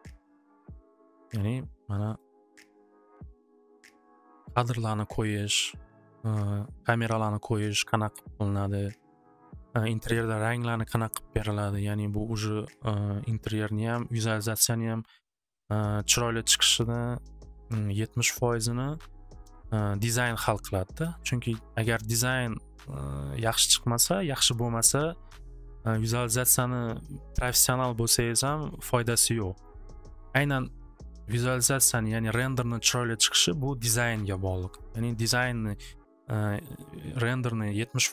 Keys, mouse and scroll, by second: 1.3 click, 2.1 click, 2.6 click, 5.8 click, 29.6-31.9 middle drag, 31.9 middle click, 32.1 middle click, 34.2 click.